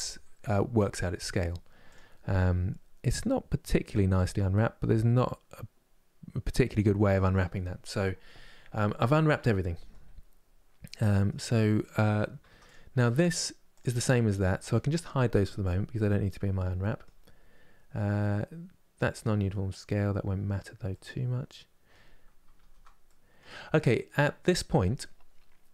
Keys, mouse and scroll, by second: 1.6 click, 8.6 scroll down 1, 8.9-10.1 middle drag, 10.1-10.7 scroll down 1, 10.7-12.1 middle drag, 12.1 Tab, 12.4 click, 12.7 middle click, 13.5 click, 14.1 click, 15.0 h, 15.3-16.9 middle drag, 16.9-20.6 scroll up 3, 20.6-22.3 middle drag, 22.3 ctrl+z, 22.8 middle click, 23.3-24.3 scroll down 3, 24.3-25.7 middle drag.